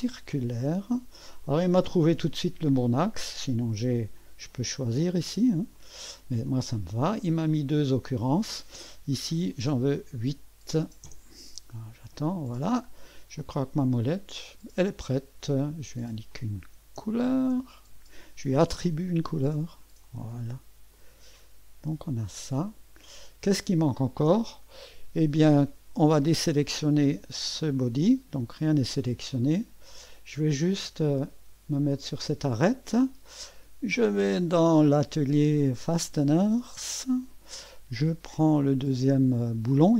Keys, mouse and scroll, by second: 0.0 click, 1.4-3.0 drag, 3.9 click, 5.8 click, 6.5 click, 9.5 click, 10.5-13.6 typing, 13.4-15.7 drag, 16.3 click, 17.3-37.8 ctrl+d, 18.9 click, 20.1 click, 21.0 click, 22.1 click, 22.7 click, 23.3-24.6 drag, 24.9 middle click, 26.2-27.3 middle drag, 27.3 click, 29.5 click, 30.2 click, 32.0 click, 34.7 click, 36.9 click.